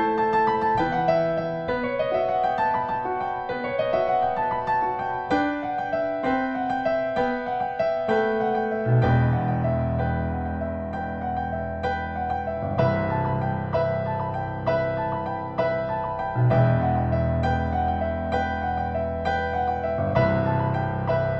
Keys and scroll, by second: 1.7 Return, 5.7 =, 7.0 super+t, 8.8-11.8 typing, 12.4 Return, 12.8 v, 14.3-15.1 typing, 16.7-20.3 typing, 18.8 Return.